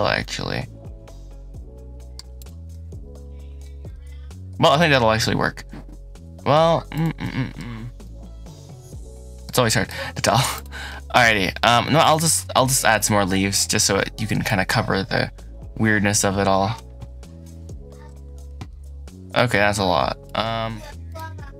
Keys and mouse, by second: 2.2 middle click, 2.5-3.5 middle drag, 3.7-4.4 middle drag, 4.6-6.4 middle drag, 7.1-7.4 middle drag, 7.9-9.3 middle drag, 9.7-10.1 middle drag, 10.4 click, 10.7-11.1 drag, 11.8 click, 14.4-20.1 shift+drag, 20.5 Tab, 21.5 click.